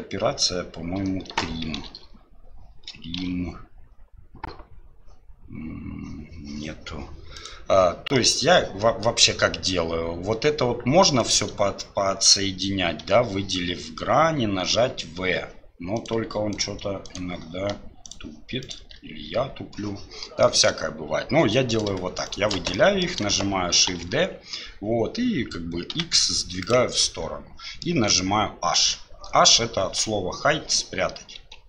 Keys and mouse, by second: 8.1 click, 11.2-16.6 right drag, 17.0 shift+right click, 20.4 middle click, 21.7 right click, 22.7 click, 23.9 shift+d, 27.1 middle click, 31.4 h.